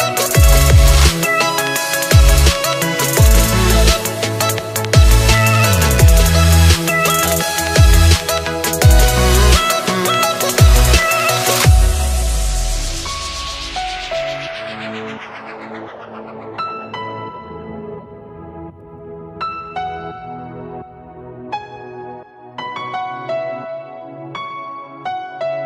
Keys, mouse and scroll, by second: 0.2-1.8 drag, 1.8 KP_3, 2.4-3.4 scroll up 2, 3.4-5.1 drag, 5.1 scroll up 3, 7.5-11.1 drag, 11.1 s, 19.1 click, 19.7-21.1 shift+middle drag, 21.1 click, 22.0-25.6 drag.